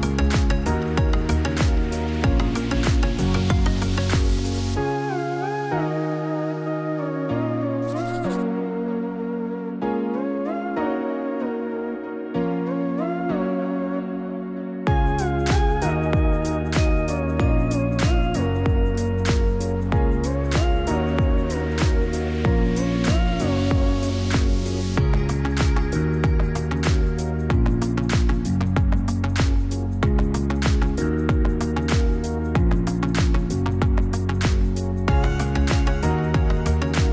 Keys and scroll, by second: 6.5 v, 8.1 p, 14.8 v.